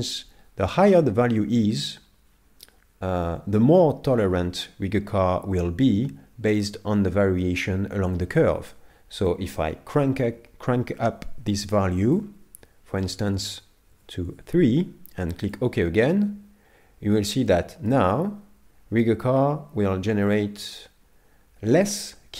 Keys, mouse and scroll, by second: 17.5 middle click.